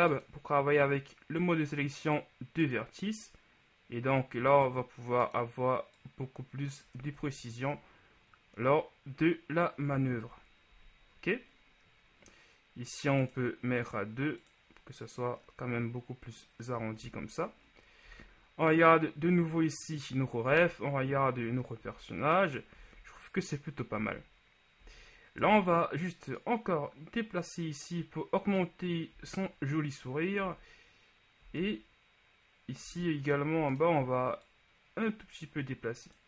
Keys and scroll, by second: 7.3 Tab, 10.4 KP_1, 17.2 a, 18.1 z, 20.7 z, 25.5 Tab, 29.3 z, 33.7 shift+z.